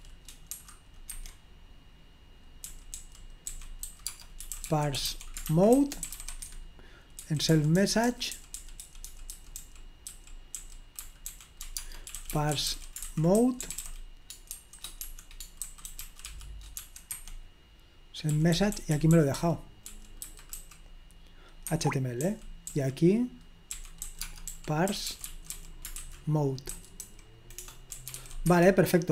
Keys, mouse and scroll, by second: 0.0-0.6 typing, 1.1 Escape, 2.5-17.2 typing, 18.3-20.6 typing, 21.7 Escape, 22.3-29.0 typing.